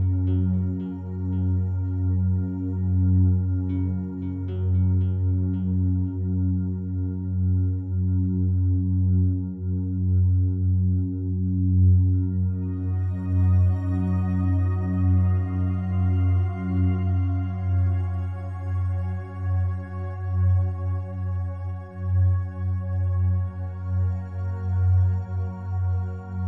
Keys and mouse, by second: 1.4-2.3 drag, 3.0-4.1 drag, 4.3 ctrl+s, 5.2-6.1 drag, 6.5-8.1 drag, 7.7 space, 8.8 space, 9.1 drag, 9.6 space, 14.2 space, 15.9-20.6 drag, 21.7 click, 23.0 click, 23.3-26.4 drag.